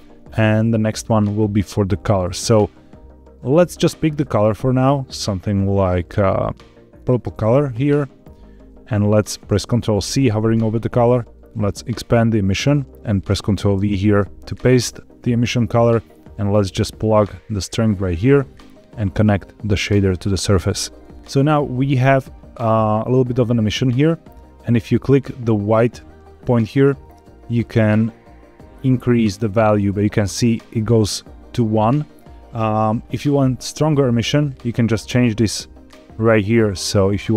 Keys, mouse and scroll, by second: 1.8-3.5 drag, 10.0 ctrl+c, 11.9 click, 13.7 ctrl+v, 16.5-17.8 drag, 18.8-20.0 drag, 24.3 click, 26.9 click, 34.6 click.